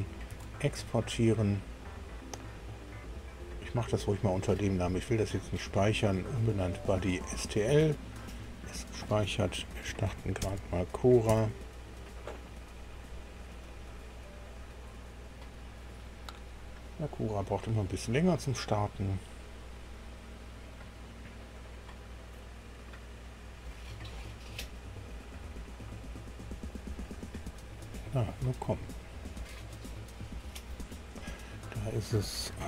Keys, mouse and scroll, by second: 0.3 ctrl+e, 8.1 click, 10.4 ctrl+alt+b, 11.2 KP_7.